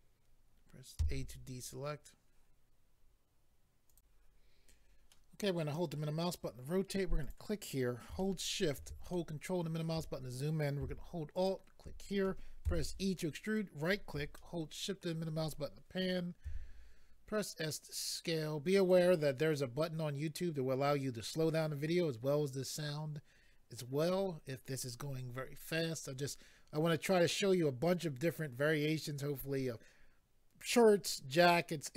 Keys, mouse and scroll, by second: 1.0 a, 3.9 click, 4.0 click, 5.1 middle click, 7.2 click, 7.3 click, 8.2 shift+middle click, 9.1 ctrl+middle click, 11.3 alt+click, 12.6 e, 13.4 right click, 14.4 shift+middle click, 16.4 s, 18.7 click, 18.9 click.